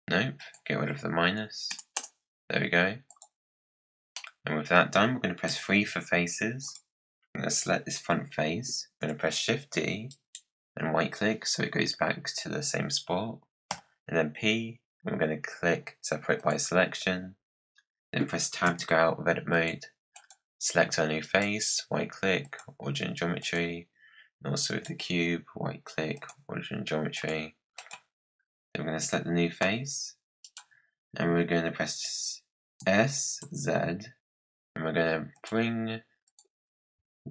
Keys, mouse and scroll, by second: 3.0 click, 3.6-4.1 scroll up 4, 4.1-5.5 middle drag, 5.5 3, 6.5 click, 8.8 shift+d, 13.6 p, 18.6 Tab, 19.4 click, 20.0 click, 21.1-23.3 right drag, 23.3 click, 24.6-27.1 right drag, 27.1 click, 27.7 click, 29.5 g, 32.7 s, 36.2-37.3 drag.